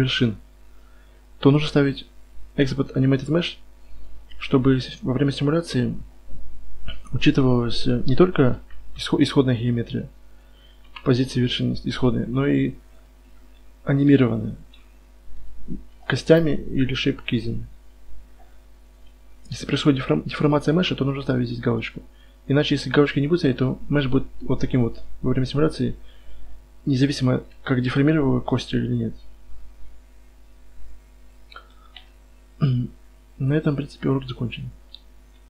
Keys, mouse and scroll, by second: 8.7 Tab, 9.4 z, 9.9 z, 10.8 KP_Divide, 11.1 z, 12.4 a, 14.1 right click, 14.1 g, 15.9 a, 18.9 Tab, 20.2 a, 24.4-25.0 middle drag, 24.7-25.1 right drag, 25.0 click, 25.1-25.5 middle drag, 25.5 click, 25.5 right click, 25.6-27.3 middle drag, 27.3 KP_1.